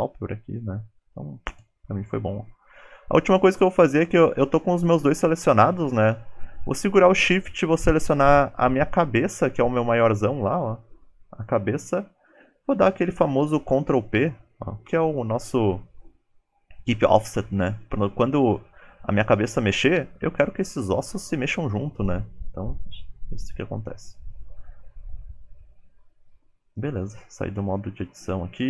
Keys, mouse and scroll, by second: 2.0 shift+middle click, 10.4 shift+click, 13.2 ctrl+p, 23.4 KP_1, 24.4 shift+middle click, 25.0 click, 25.8 Tab.